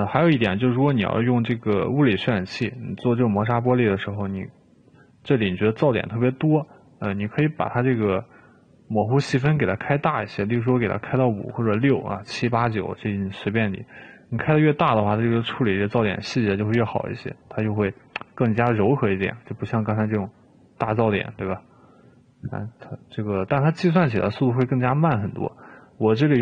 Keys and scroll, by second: 10.8 5, 11.6 r.